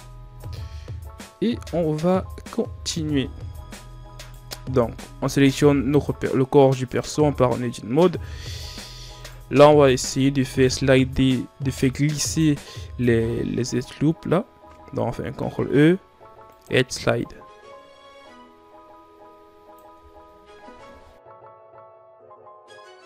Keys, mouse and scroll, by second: 0.5-1.2 shift+scroll up 2, 1.9-2.4 shift+scroll down 4, 2.4 scroll up 2, 3.3 Tab, 3.8 Tab, 4.1 right click, 4.8-6.5 scroll down 4, 6.9 Tab, 7.5-9.1 scroll up 2, 9.1 alt+right click, 15.1 ctrl+e, 19.9 Tab, 20.2-20.8 scroll down 2, 20.8 a, 21.0 scroll down 1.